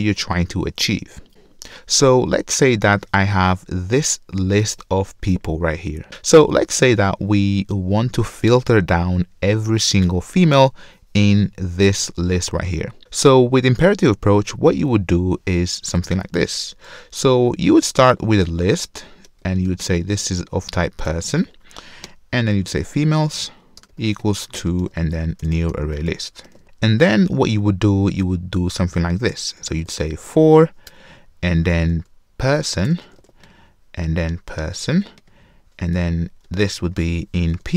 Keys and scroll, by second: 18.9 Return, 30.9 Return.